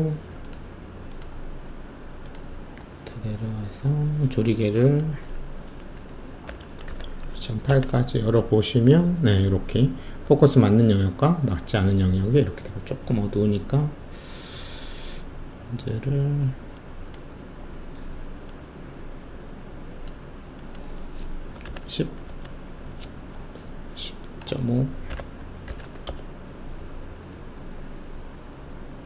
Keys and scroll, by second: 6.4-7.3 typing, 7.7 Return, 21.5 typing, 22.2 Return, 24.9-26.1 typing.